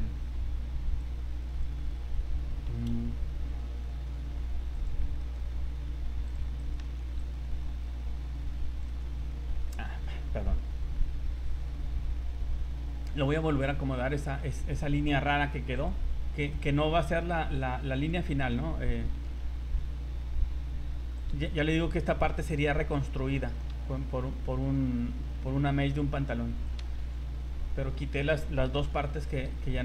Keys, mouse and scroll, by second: 1.0 click, 1.8 scroll down 2, 2.6 g, 5.2 alt+right click, 6.3 click, 6.6 right click, 6.8 c, 14.1 click, 16.5 right click, 17.9 click, 18.6-19.8 typing, 21.2 click, 21.3 c, 23.5 f, 23.7 g, 26.6 click, 27.0 c, 28.8 g.